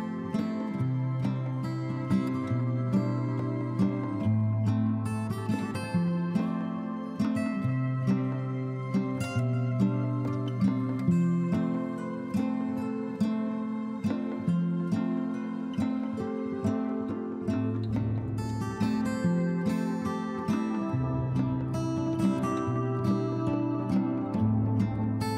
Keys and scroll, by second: 18.0 ctrl+alt+1, 18.3 ctrl+alt+1, 18.4 b.